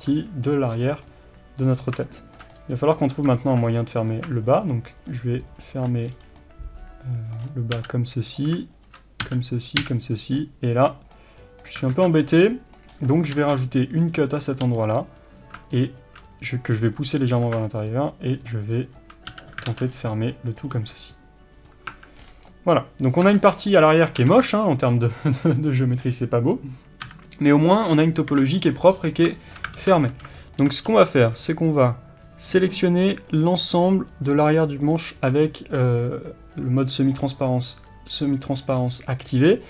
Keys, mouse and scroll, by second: 0.8-1.1 scroll up 1, 1.8-2.2 scroll up 1, 4.1 click, 6.1 scroll down 1, 6.4-8.3 middle drag, 7.5-7.8 scroll up 1, 7.8 f, 8.3 click, 9.3 f, 10.3 scroll down 1, 10.4-14.4 middle drag, 12.0 alt+a, 13.0 scroll up 1, 13.4 ctrl+r, 14.4 click, 14.7 g, 16.0 shift+click, 16.9 click, 19.3 f, 19.8 alt+a, 19.9 scroll down 1, 20.2 middle click, 20.6 click, 20.8 g, 21.7 click, 22.0 Tab, 22.2 scroll down 1, 22.5-37.2 middle drag, 23.3 Tab, 24.2 alt+a, 27.1 KP_7, 29.0-29.4 scroll up 1, 29.8 alt+z, 33.8 c, 37.2 click, 38.6-39.5 scroll down 1, 39.5-39.6 scroll up 1.